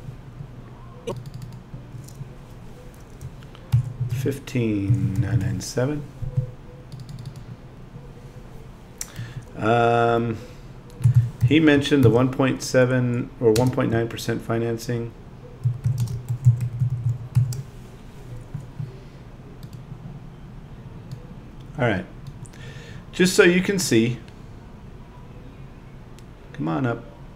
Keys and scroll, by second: 11.0 |, 11.2 •, 13.5 space.